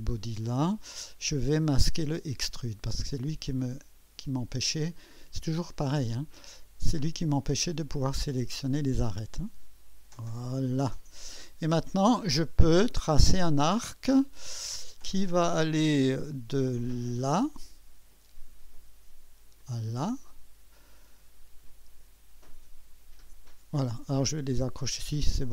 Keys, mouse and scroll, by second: 1.6 click, 3.5 click, 5.2-6.9 middle drag, 6.9 click, 8.7 click, 10.4 click, 12.7 click, 17.2 click, 19.6 click, 23.4 click.